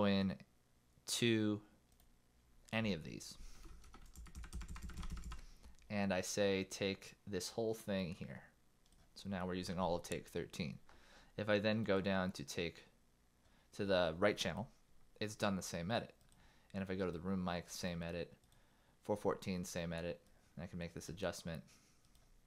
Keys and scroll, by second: 4.4 super+Right, 5.2 super+Right.